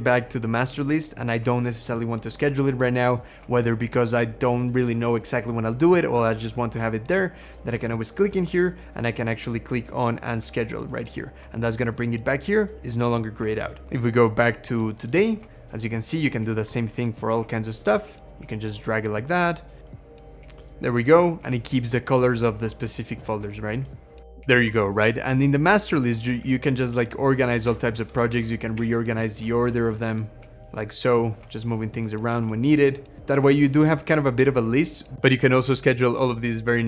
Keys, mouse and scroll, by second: 19.8 scroll down 2, 22.0 scroll down 2, 27.5 Right, 27.8 Down, 28.1 Down, 28.6 Up.